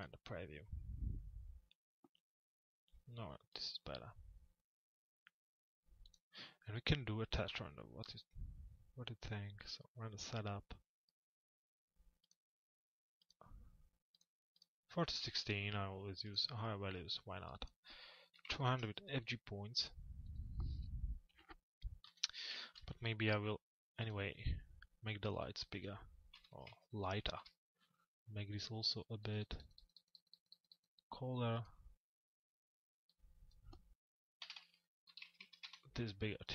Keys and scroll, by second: 21.6 p, 27.0 Return, 34.0 Delete, 35.6 Return.